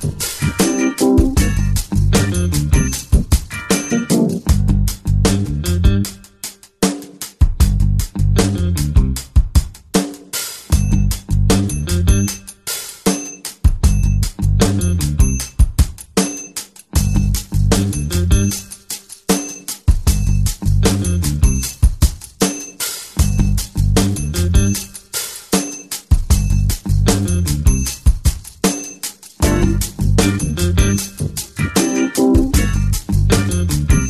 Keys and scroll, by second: 4.7 space, 11.2 Return, 11.8 ctrl+space, 13.5 space, 19.0 ], 19.2 ], 19.4 ], 19.7 ], 21.6 x, 23.6 ctrl+z.